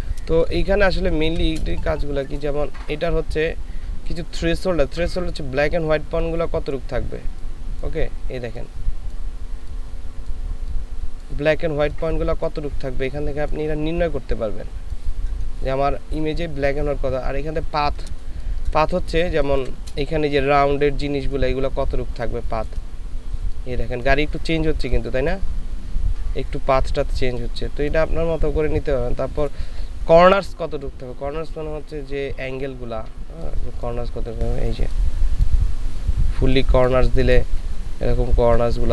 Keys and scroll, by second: 0.3 space, 18.4 ctrl+space.